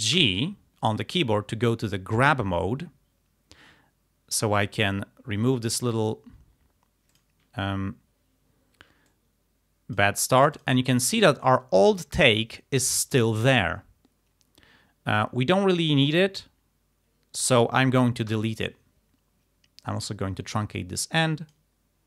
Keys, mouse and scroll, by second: 0.2 g, 4.8-6.3 drag, 7.1 click, 9.1-10.2 drag, 10.6 click, 11.1 click, 18.3 Delete, 19.9 click, 21.0 click.